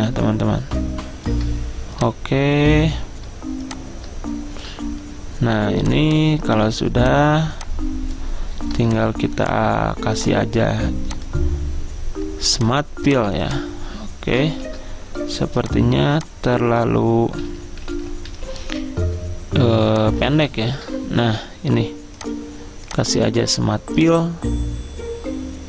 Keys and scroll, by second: 14.6 ctrl+z, 17.5 ctrl+z, 17.7 ctrl+z, 17.8 ctrl+z, 18.0 ctrl+z, 18.4 ctrl+z.